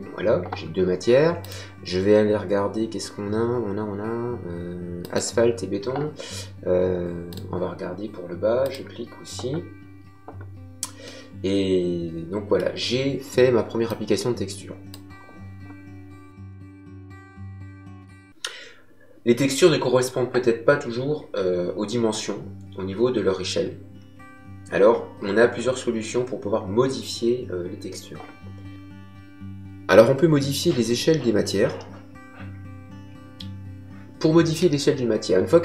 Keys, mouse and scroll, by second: 1.4 click, 5.0 click, 7.2 click, 11.0 middle click, 13.8 click.